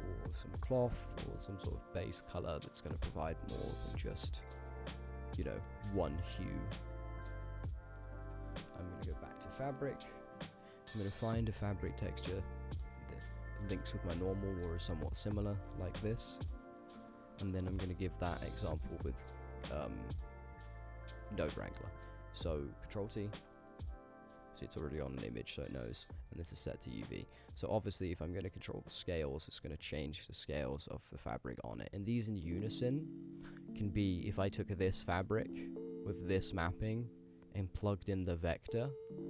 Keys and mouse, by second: 2.9-3.7 drag, 4.5 click, 16.4-16.8 middle drag, 17.1 ctrl+middle click, 17.7 KP_Decimal, 19.0 middle click, 19.6 shift+middle drag, 20.5-20.8 ctrl+middle drag, 21.1 shift+click, 22.1 click, 23.2 ctrl+t, 23.6 middle click, 24.3-25.0 drag, 25.1 middle click, 25.7 click, 25.8 g, 26.5 click, 26.7 g, 28.6-31.6 alt+shift+drag, 32.0 ctrl+z, 32.5 click, 32.9 click, 34.1 click, 34.2 g, 35.2 middle click, 35.5 click, 36.0 g, 36.7 middle click, 38.1-39.2 drag.